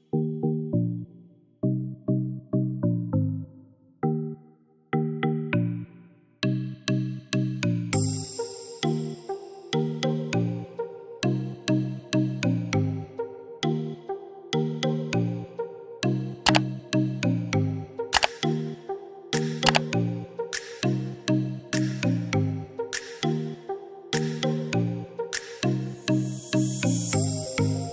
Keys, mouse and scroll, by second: 6.0 ctrl+d, 6.6-27.9 drag.